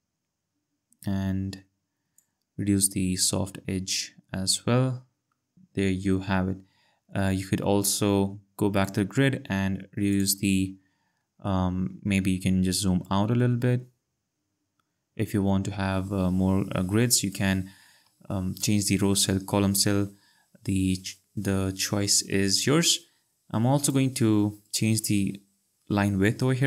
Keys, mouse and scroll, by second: 3.1 click, 8.7 click, 13.0 click, 18.3 ctrl+z, 23.8 click.